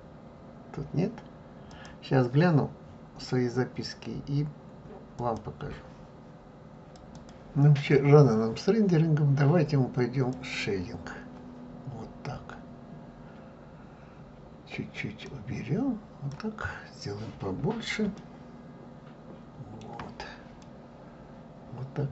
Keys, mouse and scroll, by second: 2.0 click, 10.4 click, 13.0-14.3 scroll, 14.3-15.3 scroll up 1, 15.3 scroll up 1, 15.6-16.8 drag, 16.8 scroll, 18.5-22.1 shift+middle drag.